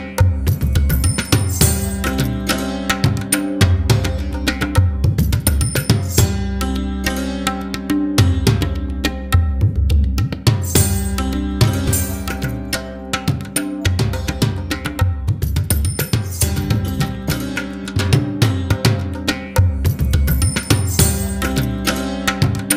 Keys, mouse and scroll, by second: 17.1-20.2 drag.